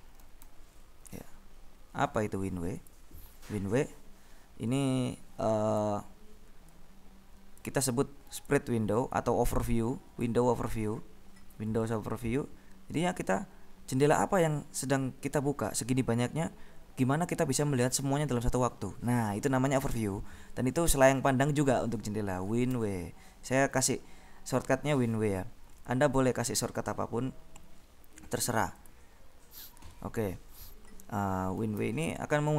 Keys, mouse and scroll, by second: 0.6 w, 2.9 click, 5.8 click, 7.1-8.2 drag, 8.5 click, 9.2-10.9 drag, 23.0 w, 29.1 click, 32.1 w.